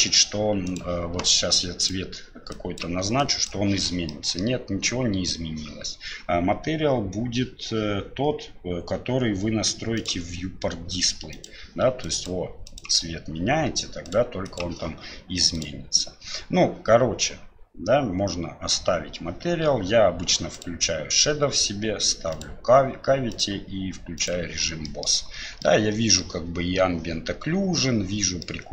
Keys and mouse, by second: 0.7 click, 1.8 click, 4.1 middle click, 10.1 click, 15.6-24.5 drag, 24.8 middle click, 25.6-26.2 middle drag, 28.4-28.7 middle drag.